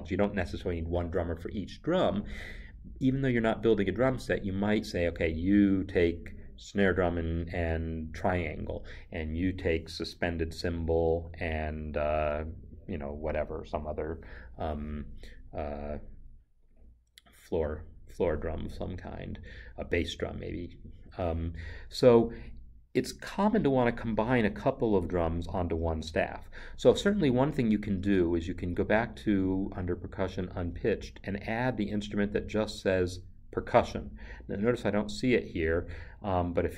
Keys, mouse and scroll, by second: 26.7 Right, 30.0 |.